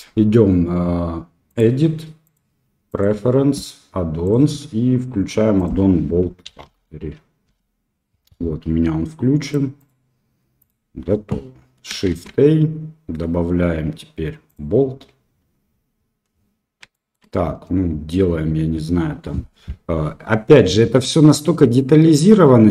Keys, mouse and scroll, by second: 2.3-3.0 drag, 12.0 shift+a, 16.9 shift+middle drag.